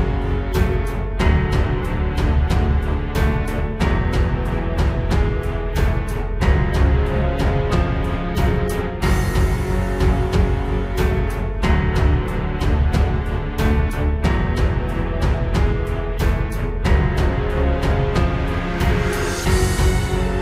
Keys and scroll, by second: 0.5 ctrl+d, 2.6 ctrl+shift+j, 3.0 ctrl+t, 3.8 ctrl+z, 5.6 ctrl+space, 6.1 ctrl+z, 6.2 ctrl+j, 6.4 ctrl+t, 7.0 ctrl+t, 9.4 ctrl+space, 10.3 ctrl+space, 12.1 ctrl+space, 13.1 ctrl+e, 13.5 ctrl+e, 14.1 ctrl+space, 14.5 ctrl+z, 14.8 ctrl+z, 15.6 ctrl+d, 16.7 ctrl+e, 16.9 ctrl+space, 19.3 ctrl+space, 19.5 ctrl+z, 19.7 ctrl+space.